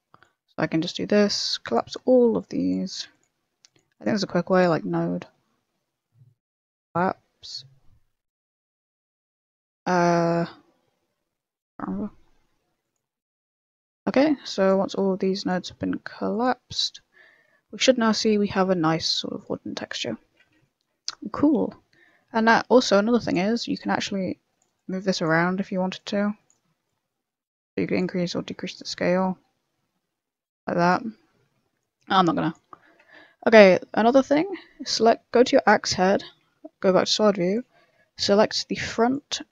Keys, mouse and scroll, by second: 0.1 click, 1.7 click, 1.9 middle click, 2.3 click, 3.1 click, 3.9 click, 4.4 click, 11.6 scroll down 4, 11.8 middle click, 12.8 click, 13.3 click, 14.4 click, 15.3 click, 16.7 click, 16.7 middle click, 17.2 middle click, 17.6 scroll up 6, 18.1 middle click, 18.7 scroll up 1, 19.1-19.4 scroll down 10, 19.5 middle click, 20.0 middle click, 20.6 shift+middle click, 20.6 shift+middle click, 21.0 scroll up 2, 21.5 middle click, 21.8-22.1 scroll up 9, 22.1 middle click, 23.2 click, 23.8 click, 25.1 click, 25.9 click, 26.8 click, 28.8 click, 31.9 click, 32.8 scroll down 3, 32.9 middle click, 33.2 shift+middle click, 33.5 middle click, 33.5 scroll up 1, 34.0 right click, 34.1 middle click, 34.4 Tab, 34.5 scroll up 2, 36.2 scroll up 1, 36.4 KP_1, 37.0 click, 37.4 click, 38.2 b.